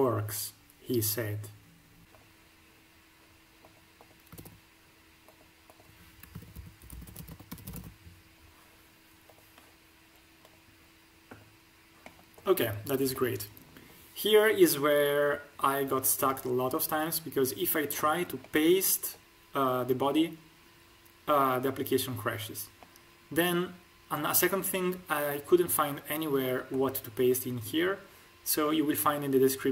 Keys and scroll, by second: 4.3 ctrl+v, 6.2-7.7 typing.